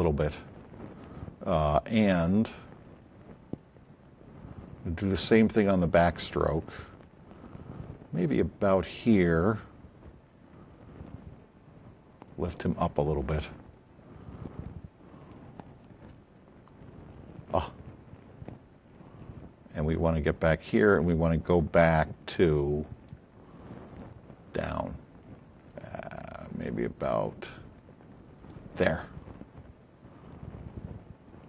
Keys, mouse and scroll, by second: 2.2-3.3 drag, 8.0 click, 11.0-12.6 drag, 14.4 click, 21.2-23.1 drag, 24.5 click, 27.8 click, 30.3-31.4 drag.